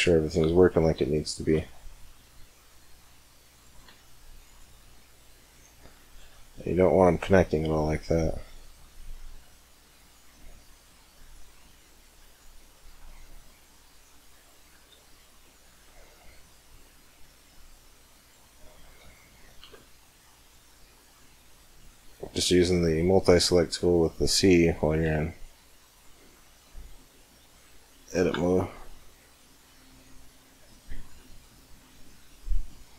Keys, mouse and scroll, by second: 0.9-2.1 middle drag, 2.3 middle click, 3.7 c, 18.4-19.5 right drag, 18.8 middle click, 19.6 c, 24.1 right click, 24.2-26.8 middle drag, 24.3 right click, 24.5 right click, 24.9 right click, 25.1 right click, 25.3 click, 27.2-27.5 scroll up 1, 27.5-29.8 middle drag, 28.2 c, 32.7-32.9 middle drag.